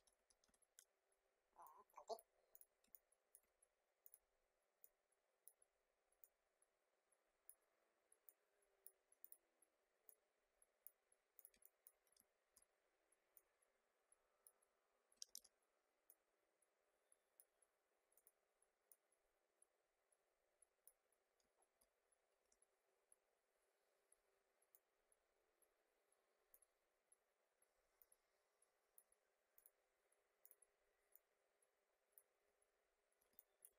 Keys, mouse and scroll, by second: 1.6 click, 2.8 space, 2.9 click, 3.1 space, 4.0-11.3 drag, 11.5 space, 11.6 click, 11.8 space, 12.3 alt+scroll down 1, 13.3-15.3 drag, 15.3 ctrl+z, 16.0-21.5 drag, 21.5 alt+scroll up 1, 22.4 a, 24.7-27.7 drag, 27.9-32.6 drag, 32.6-33.0 alt+scroll down 1, 33.0 alt+scroll up 1, 33.3 space, 33.3 click, 33.5 space.